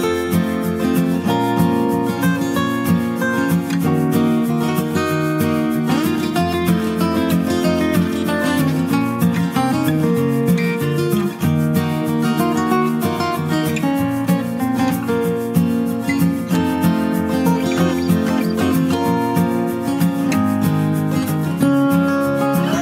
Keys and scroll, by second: 3.5 ctrl+z, 11.8 ctrl+Return, 21.1-22.8 ctrl+space, 22.3-22.8 typing.